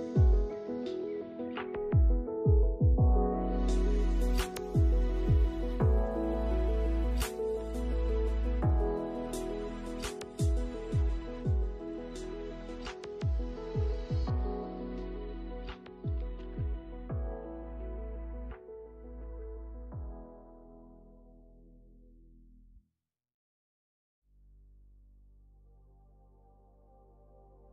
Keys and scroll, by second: 0.2 space, 3.0 space, 16.8 space, 22.4 space.